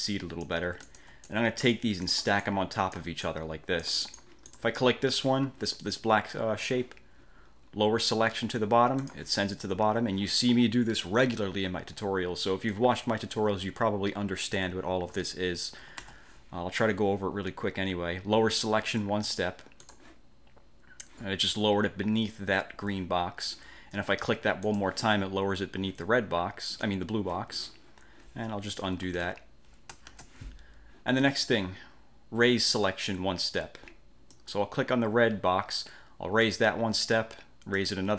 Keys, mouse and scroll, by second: 0.2 click, 1.0 shift+click, 1.7 click, 9.2 click, 16.2 ctrl+z, 20.0 click, 24.8 click, 29.0 ctrl+z, 30.2 ctrl+shift+z, 34.4 click, 36.6 click, 37.9 click.